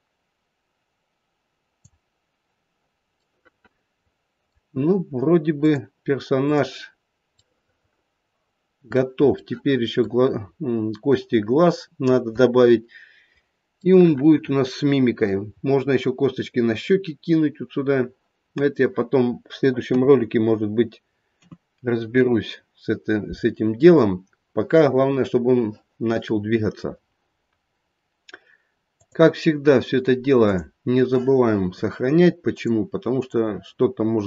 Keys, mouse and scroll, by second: 3.2 middle click, 4.1 middle click, 5.5 click, 6.9-7.3 scroll up 1, 7.4 middle click, 9.3 middle click, 13.8 middle click, 14.2 middle click, 15.2 middle click, 15.5-16.2 scroll up 1, 16.2-18.3 scroll down 2, 19.8 KP_3, 21.3 KP_2, 22.0 KP_1, 23.2-24.3 scroll down 1, 28.9 click.